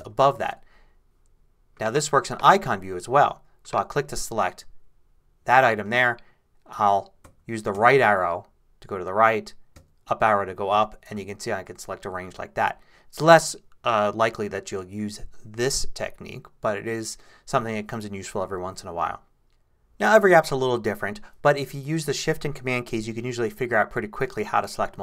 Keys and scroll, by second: 6.7 shift+Right, 7.2 shift+Right, 7.7 shift+Right, 9.7 shift+Up, 10.7 shift+Right.